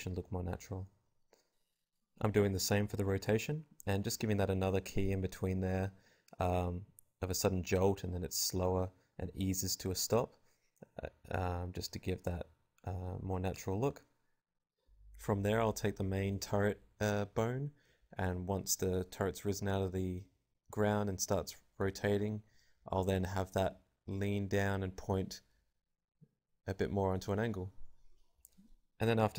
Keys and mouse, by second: 1.7-3.1 typing, 3.0-8.5 drag, 8.8 v, 8.9-10.1 drag, 8.9 g, 9.5 g, 10.2 click, 10.2 g, 11.3-16.5 right drag, 16.5-19.5 drag, 21.0 click, 21.2 i, 21.8-23.5 drag, 22.2 i, 22.9 alt+a, 23.5 alt+a, 23.7 right click, 24.5 a, 24.5 v, 25.7 click, 25.7 b, 26.1 click, 27.3-29.3 typing, 27.8 click, 29.1 right click.